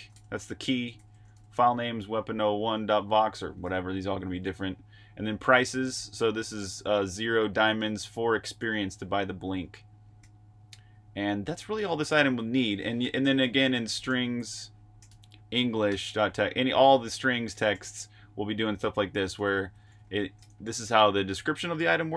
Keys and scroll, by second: 0.3-1.8 typing, 5.3-6.5 typing, 7.6 l, 10.1-10.9 typing, 13.0-21.2 typing, 19.3 Escape.